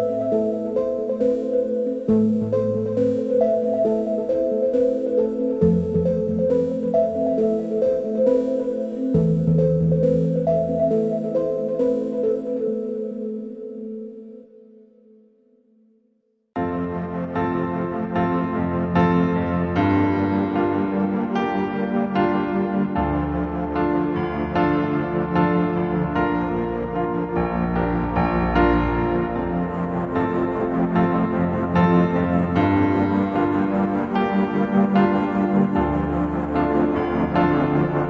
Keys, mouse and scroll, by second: 3.6 ctrl+z, 4.3 ctrl+z, 6.0 ctrl+r, 7.9 middle click, 8.3 drag, 9.4 click, 10.1-11.0 middle drag, 11.7-12.4 middle drag, 13.3 Tab, 14.0-15.4 middle drag, 15.4 Tab, 18.4 a, 22.7 middle click, 22.9-24.2 drag, 25.5 Tab, 26.6 Tab, 27.5-28.0 shift+drag, 32.3 middle drag, 33.8-34.4 middle drag, 34.5-35.0 shift+middle drag, 35.0 shift+click, 36.9 shift+click.